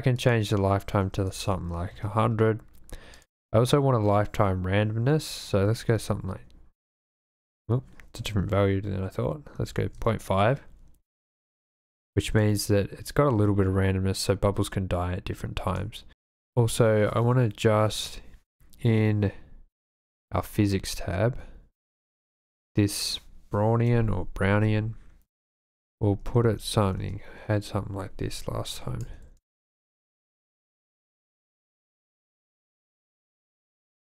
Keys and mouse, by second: 0.2-2.0 drag, 1.6 KP_0, 3.2-6.0 drag, 7.4-10.0 drag, 11.8 click, 12.3 space, 15.7 space, 20.1 click, 22.2-27.1 drag, 28.8 click, 29.3 space.